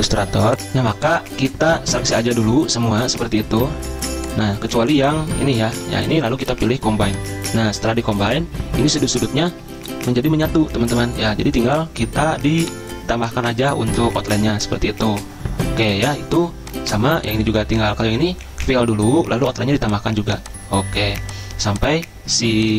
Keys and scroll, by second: 0.5 alt+Tab, 5.9 ctrl+z.